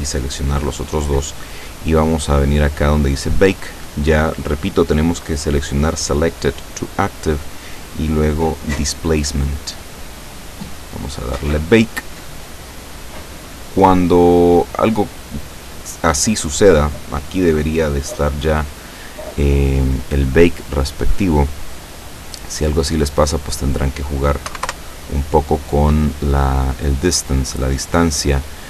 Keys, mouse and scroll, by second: 1.7-2.4 scroll down 1, 6.9 click, 9.4 click, 10.8 click, 20.0 scroll down 2, 20.7-21.1 scroll down 2, 23.2 click, 24.6 1, 24.7 Return, 27.7 click.